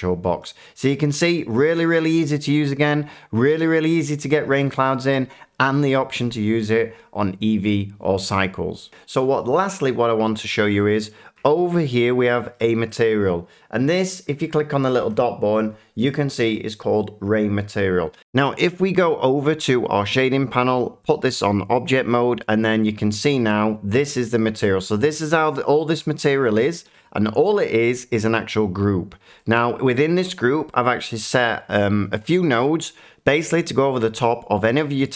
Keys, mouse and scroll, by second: 1.3 middle click, 2.7 middle click, 9.6 click, 11.0 shift+middle click, 11.9 shift+middle click, 12.1-12.9 shift+scroll, 12.9 click, 18.2 F9, 19.3 click, 21.1 click, 21.8 click, 23.9 shift+middle click, 26.9 middle click, 27.8 middle click, 29.5 shift+middle click, 31.3 shift+middle click.